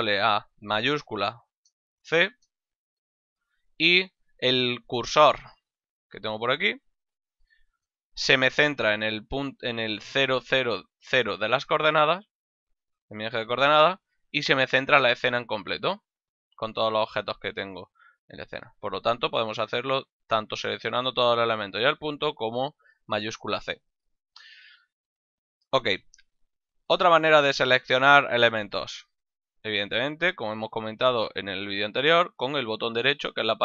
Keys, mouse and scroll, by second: 1.8 shift+middle click, 2.8 shift+c, 4.2 click, 6.2 click, 29.6 right click, 31.8 right click.